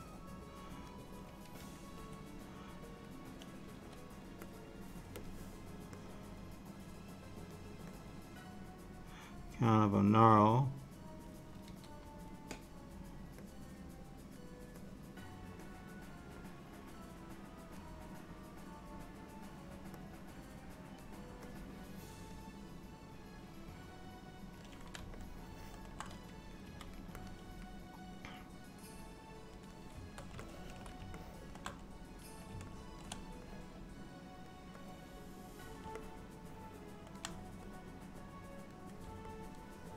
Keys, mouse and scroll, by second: 0.0 click, 2.0 g, 3.8 f, 5.3 click, 6.1 click, 8.0 click, 10.0 click, 11.7 f, 13.5 click, 14.9 click, 16.6 click, 20.1 click, 21.6 click, 24.1 click, 25.2 shift+middle click, 26.7 f, 28.3 click, 30.5 ctrl+middle click, 31.2 shift+middle click, 32.8 ctrl+middle click, 33.6 click, 34.9 click, 36.1 middle click, 37.8 click, 39.4 middle click.